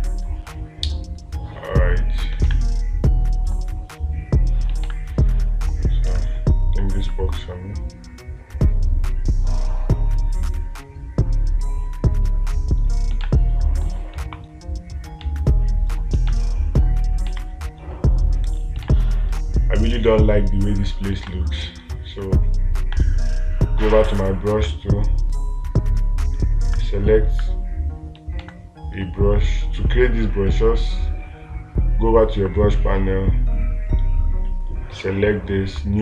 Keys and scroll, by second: 2.9 space, 5.3 space, 13.7 space, 15.7 space, 16.8 space, 19.3 space, 21.7 space, 28.9 space.